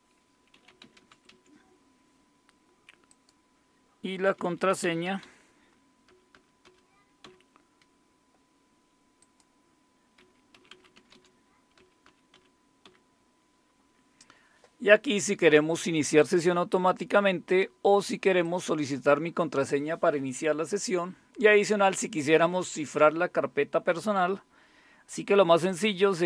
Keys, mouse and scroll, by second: 0.0-1.8 typing, 3.1 click, 3.8-7.2 typing, 9.2 click, 10.2-12.8 typing, 16.2 click, 18.4 click, 25.7 click.